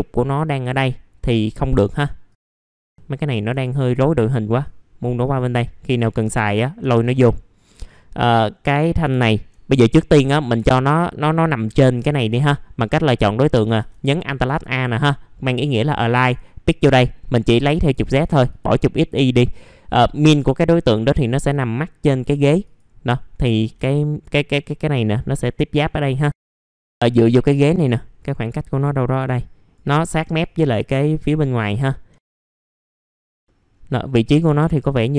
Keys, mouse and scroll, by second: 0.4 middle click, 0.6-1.4 scroll down 1, 1.4 click, 1.7-2.3 scroll down 1, 2.3 click, 2.7 ctrl+click, 2.8-3.2 scroll down 1, 3.6 ctrl+click, 3.9 middle click, 4.6 click, 5.5 scroll up 1, 6.3 middle click, 7.3 middle click, 7.5-8.1 scroll down 1, 8.1-9.1 scroll up 1, 9.1 alt+middle click, 10.6 middle click, 10.8-11.6 scroll down 1, 11.6-12.7 scroll up 1, 12.7 middle click, 16.2-23.7 drag, 23.7 click, 24.0 middle click, 24.5-25.8 scroll up 1, 25.8 middle click, 25.9-26.5 scroll down 1, 26.5 click, 27.0-28.2 scroll up 1, 28.2 middle click, 29.1 click, 30.4 click, 31.8 alt+middle click, 32.7-33.2 scroll down 2, 32.9 middle click, 33.2 middle click, 33.7-34.4 scroll up 1, 34.4 F3.